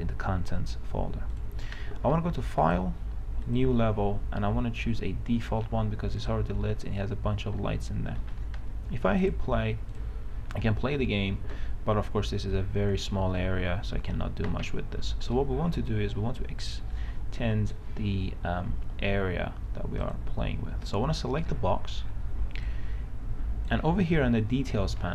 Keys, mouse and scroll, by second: 10.6 a, 10.9 s, 12.0-12.8 w, 12.9 w, 15.6 right click, 15.6-16.6 typing, 17.6 s, 20.3 click, 21.7 right click, 21.9 d, 22.5 w, 22.9 click.